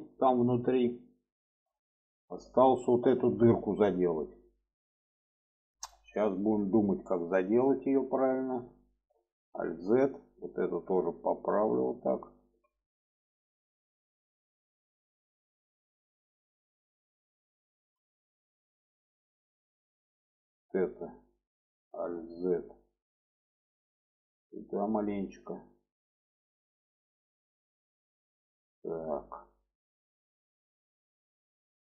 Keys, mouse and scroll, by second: 0.4-1.6 middle drag, 2.0-3.1 middle drag, 3.5 shift+middle drag, 4.3-5.6 middle drag, 5.9 shift+middle click, 6.7 shift+middle click, 7.6 shift+middle click, 8.3 shift+middle click, 9.2 alt+z, 10.0 click, 11.0-12.2 drag, 12.3 alt+z, 12.9-14.3 middle drag, 14.8 middle drag, 15.7-16.7 drag, 17.6 shift+middle click, 18.3 click, 19.1 shift+middle click, 21.9 alt+z, 23.0 click, 24.4-26.1 drag, 26.5 click, 26.9 alt+z, 27.4-30.4 middle drag, 30.6-31.6 middle drag.